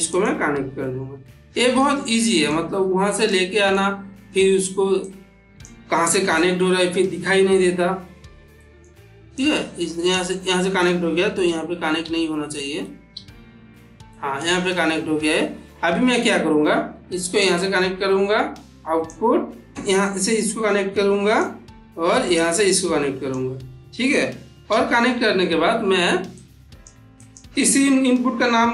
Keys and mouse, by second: 0.0 click, 1.0-1.9 ctrl+middle drag, 3.2-3.8 middle drag, 4.9-5.5 click, 6.2-7.4 middle drag, 9.2-10.2 drag, 10.9 click, 11.3 ctrl+z, 11.9 ctrl+z, 13.0 ctrl+z, 14.0 middle click, 17.3-19.2 drag, 19.7 middle click, 20.1-21.3 drag, 22.2-23.4 drag, 24.6 n, 26.2-26.8 click.